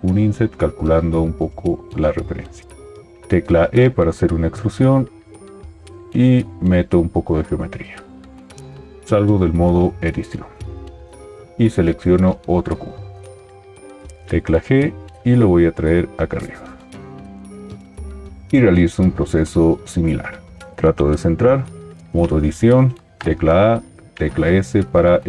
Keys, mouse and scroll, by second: 3.0 e, 9.0 Tab, 14.2 g, 22.1 Tab, 23.3 a, 24.4 s.